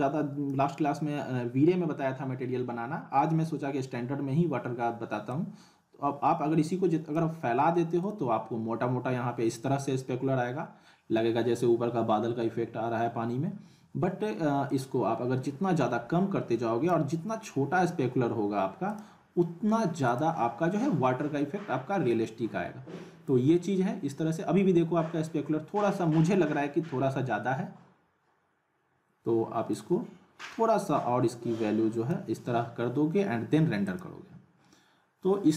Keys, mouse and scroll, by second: 5.3-7.2 drag, 14.7-17.2 drag, 29.7-32.2 drag, 33.9 click.